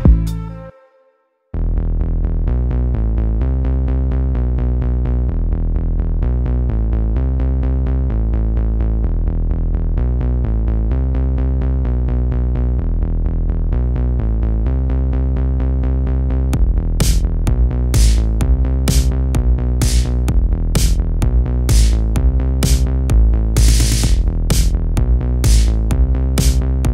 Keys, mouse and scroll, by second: 1.4-5.7 drag, 8.2 Tab, 8.6-9.2 scroll up 3, 9.2 KP_1, 10.4 r, 12.0 g, 12.8 s, 13.8-14.2 scroll up 2, 14.2 shift+middle click, 14.6 s, 15.9 s, 16.9 middle click, 17.6 Page_Down, 17.8 KP_7, 18.6 shift+middle click, 19.2 g, 19.9 ctrl+z, 20.4 g, 21.2 middle click, 21.6-22.2 scroll up 1, 22.2 g, 23.1 shift+middle click, 23.9-24.2 scroll down 1, 24.2 s, 25.5 middle click, 26.4-26.7 scroll up 2, 26.7 s.